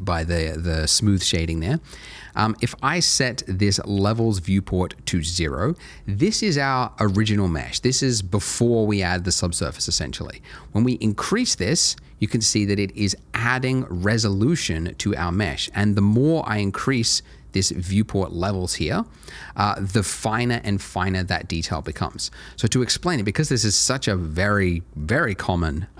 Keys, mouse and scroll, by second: 3.9 click, 11.2 click, 16.0 click, 21.8 click, 22.1 double click, 22.6 click, 25.7 scroll up 1.